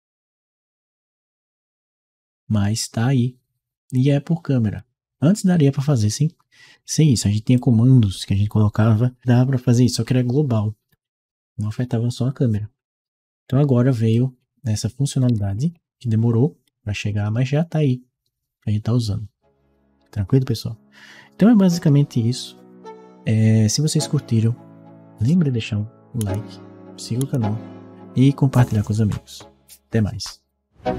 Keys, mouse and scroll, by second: 4.6 click, 5.6-7.3 right drag, 5.6 a, 6.4 w, 7.3 click, 13.9-16.9 right drag, 15.1 d.